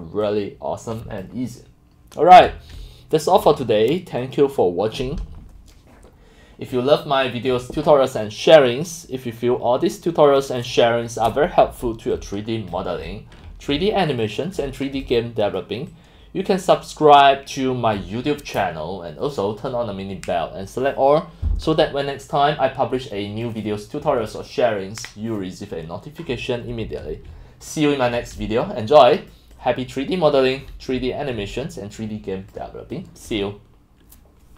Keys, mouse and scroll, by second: 0.4-1.2 drag, 2.7-3.3 typing, 2.9-4.1 drag, 4.7-9.4 drag, 10.5 click, 11.3 middle click, 11.4 middle click, 12.2-17.9 typing, 12.7 click, 13.7 click, 14.3 click, 14.6 click, 15.2 click, 18.0 click, 22.2-23.5 drag, 27.3-33.2 typing, 27.7 click, 28.4-29.4 drag, 29.6 click, 30.6 click, 32.5 click, 33.0 click.